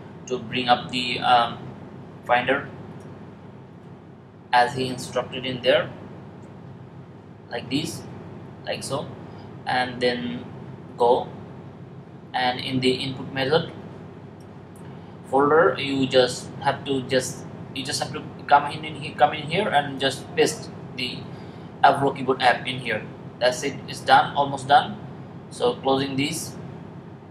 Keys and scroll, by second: 6.1 shift+super+g.